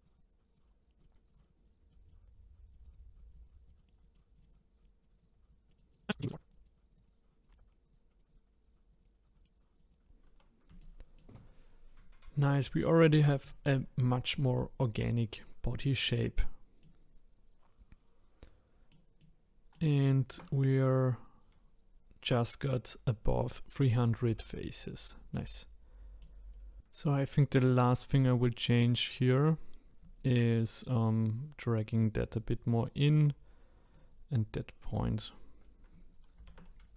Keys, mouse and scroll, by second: 0.6-1.0 scroll down 1, 1.0 click, 1.0 middle click, 1.1 middle click, 1.3 click, 1.5 click, 1.9 middle click, 2.8 click, 3.2 middle click, 3.4 click, 3.7 middle click, 3.8 scroll down 2, 4.1 middle click, 4.5 click, 4.9 middle click, 5.1 click, 5.8 middle click, 5.9 click, 6.0 middle click, 6.1 scroll up 1, 6.5 middle click, 7.0 click, 7.5 shift+middle click, 8.3 click, 8.8 scroll down 1, 9.3 middle click, 9.9 click, 10.0-10.8 scroll down 2, 10.8-13.9 shift+middle drag, 14.5 shift+middle click, 15.3-15.7 scroll down 1, 15.7 middle click, 16.4 scroll down 1, 16.8-18.1 middle drag, 19.2 middle click, 20.3 Tab, 25.5 middle click, 26.5 scroll up 2, 27.6 click, 28.4-29.1 scroll up 3, 29.1-30.2 scroll down 1, 30.2 shift+click, 31.1 click, 32.9 click, 33.9 click, 36.4 ctrl+z.